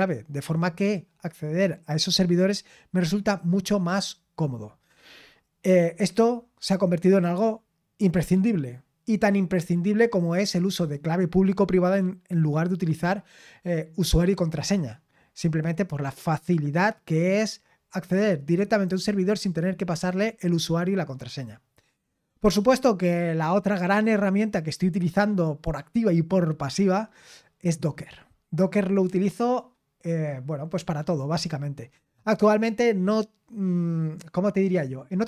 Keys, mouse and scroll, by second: 21.5-35.2 scroll down 4.